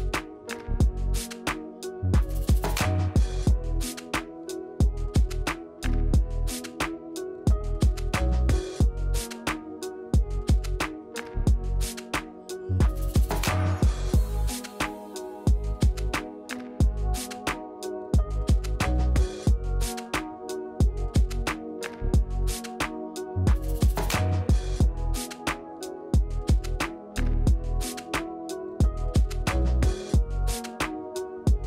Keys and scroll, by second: 1.5 space, 3.8 Tab, 9.1 ctrl+1.